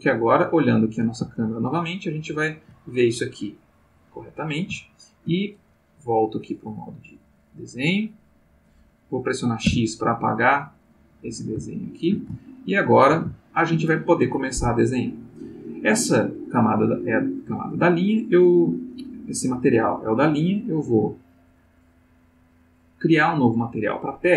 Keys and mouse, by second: 0.4 click, 1.4-2.8 ctrl+middle drag, 3.8 click, 4.8 ctrl+middle click, 6.2 click, 7.6 click, 9.7 x, 10.8 click, 11.7 shift+middle click, 12.4 ctrl+shift+middle click, 13.3 ctrl+shift+middle click, 20.6 click.